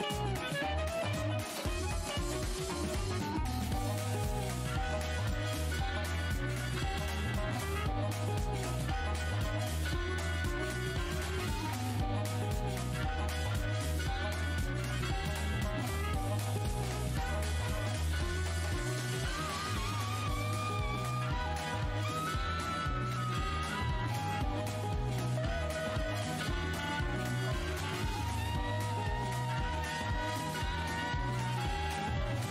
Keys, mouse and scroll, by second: 0.9 alt+scroll, 1.2 alt+click, 2.9 alt+click, 5.2-5.5 alt+scroll up 1, 6.7 click, 7.2 w, 8.5 alt+click, 11.6 alt+click, 13.8-14.3 scroll up 1, 14.3 scroll up 1, 14.8 alt+click, 19.7 alt+scroll down 1, 20.3 alt+click, 20.8 scroll down 1, 22.7 click, 22.8 scroll up 1, 23.5 alt+click, 25.2 click, 29.9 w, 31.5 alt+click.